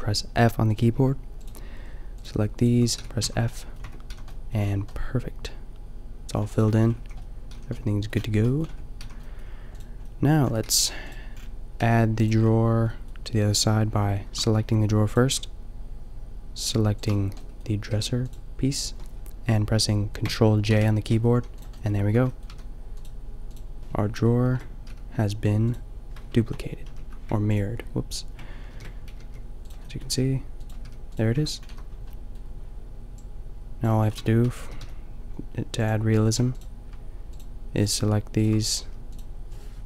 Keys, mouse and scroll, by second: 3.0 f, 3.2 a, 3.9 Tab, 4.1 a, 6.7 Tab, 7.0 a, 7.5 a, 8.7 Tab, 9.1 a, 9.8-12.3 middle drag, 10.7 g, 11.9 g, 14.7 g, 17.9 g, 20.7 ctrl+j, 21.4 a, 21.7-25.7 drag, 22.0 Tab, 22.5 a, 24.5 ctrl+l, 25.9 click, 28.7 ctrl+super+l, 29.2 g, 30.0 g, 30.8 g, 31.2-33.1 drag, 31.3 Tab, 31.7 a, 33.8 click, 34.1 Tab, 34.6 g, 36.3 a, 38.9 g.